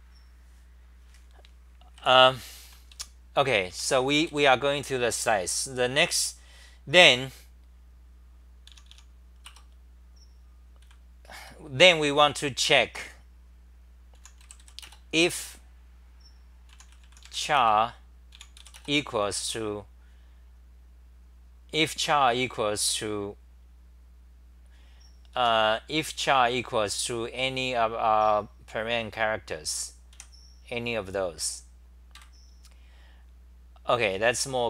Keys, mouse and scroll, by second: 1.9 w, 2.6 c, 2.9 ,, 3.7 Home, 4.3 3, 8.7 o, 8.9 o, 9.4 Return, 10.8 c, 11.4 Return, 14.2 u, 15.2 Home, 16.7 u, 25.4 Home, 26.4-28.0 scroll up 8, 28.0-29.7 scroll up 1, 30.1 2, 32.1 ctrl+g.